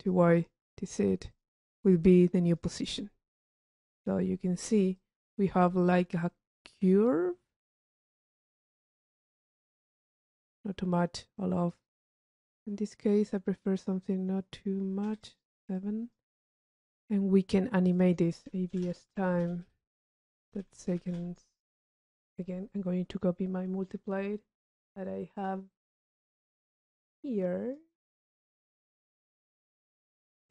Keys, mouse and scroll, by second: 2.7 click, 4.0 click, 5.1 click, 6.8 click, 7.7 click, 8.4 middle click, 9.8-11.5 drag, 15.9 click, 18.1 drag, 24.2 click, 30.2 click.